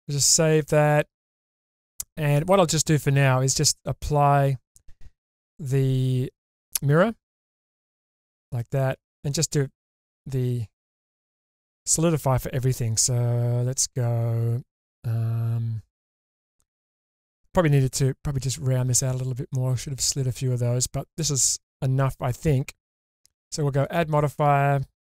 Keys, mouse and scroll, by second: 1.3 scroll down 1, 1.6 middle click, 3.5 click, 5.4 Tab, 7.3-8.2 drag, 8.9 Tab, 9.5-9.8 scroll up 2, 9.8-10.8 middle drag, 13.7 click, 14.3 Tab, 17.7-20.7 scroll up 1, 20.7 scroll down 1, 20.7 scroll down 1.